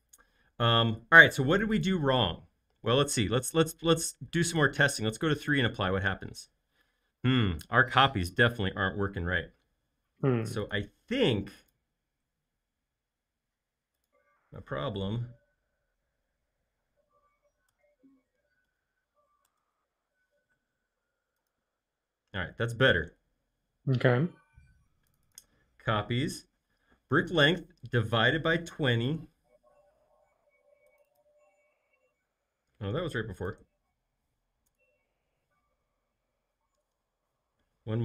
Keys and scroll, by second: 17.8 BackSpace, 18.7 /, 19.4 Return, 34.8 BackSpace.